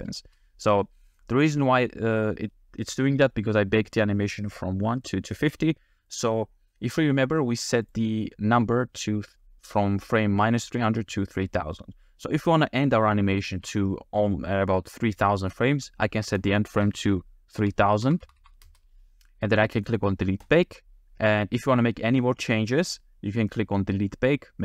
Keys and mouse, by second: 0.2 space, 7.9 click, 16.5-18.7 drag, 18.2 0, 18.4 0, 20.5 click.